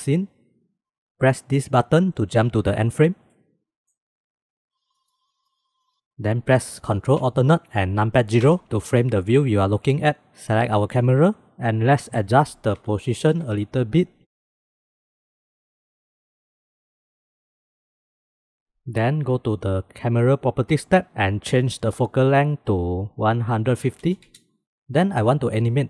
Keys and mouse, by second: 3.0 click, 3.4 middle click, 4.3 click, 4.5 right click, 4.8 middle drag, 5.8-7.2 shift+middle drag, 8.4 ctrl+alt+KP_0, 11.7-15.5 drag, 15.5 middle click, 15.6 right click, 16.3-18.0 middle drag, 18.0 right click, 20.8 click, 21.9-24.3 right drag, 24.3 click, 24.7 ctrl+s.